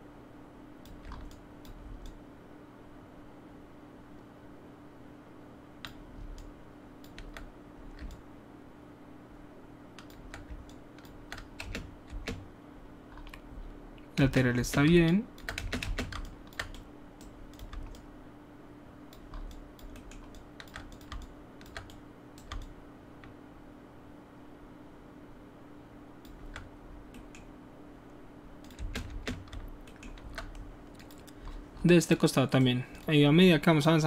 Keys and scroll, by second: 11.6 alt+space, 12.0 typing, 14.2 space, 15.5 alt+space, 28.7 space, 29.0 space.